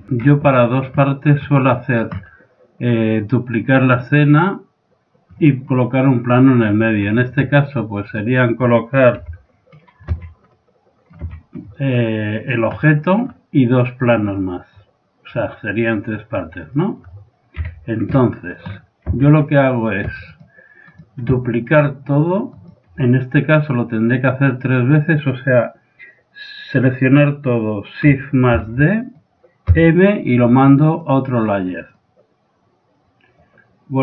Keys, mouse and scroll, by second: 0.6-8.2 middle drag, 8.2-9.2 right drag, 9.2 KP_7, 9.7 click, 10.1 z, 10.5 middle click, 11.2 z, 12.6-15.7 drag, 15.7 middle click, 16.8 middle click, 17.7 KP_1, 19.1 z, 20.3 right click, 20.8 click, 21.1 right click, 21.2 click, 21.5 right click, 22.5-24.2 drag, 24.2 right click, 28.6 shift+d, 29.1-31.1 drag, 29.7 m, 32.0-33.9 drag.